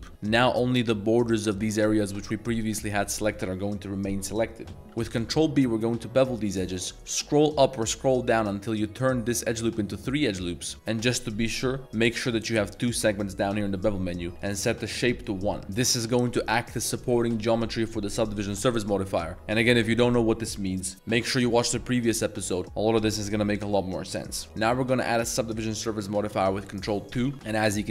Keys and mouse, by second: 1.5 middle click, 2.2 middle drag, 3.0 middle drag, 4.7 middle click, 4.8 ctrl+b, 5.0 ctrl+b, 12.4 click, 14.4 click, 15.8 Tab, 24.4 ctrl+0, 24.4 middle click, 25.1 middle click, 27.2 ctrl+2, 27.5 middle drag.